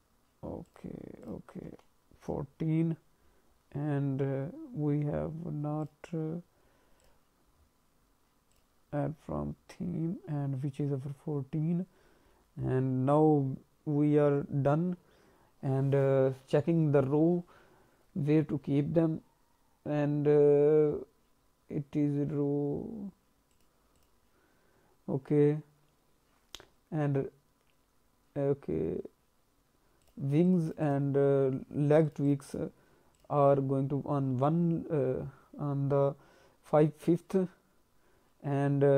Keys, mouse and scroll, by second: 0.6 click, 1.2 click, 2.9-3.7 scroll up 4, 4.0-5.8 scroll down 3, 5.8 click, 7.5-8.1 scroll down 2, 8.5 click, 8.9-9.8 scroll down 5, 10.7-11.5 scroll down 2, 11.5-11.9 scroll down 1, 12.3-13.3 scroll up 3, 15.4-16.2 scroll down 2, 23.5 click, 23.9 click, 30.0 click, 30.4 click, 30.6 click, 30.8 click, 32.0 click, 32.2 click, 32.4 click, 33.1 click.